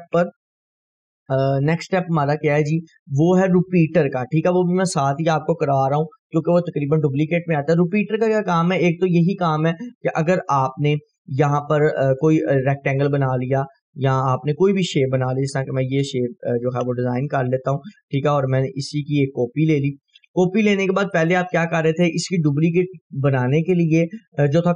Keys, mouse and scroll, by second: 0.2 F4, 9.4-12.5 drag, 21.3 ctrl+right click.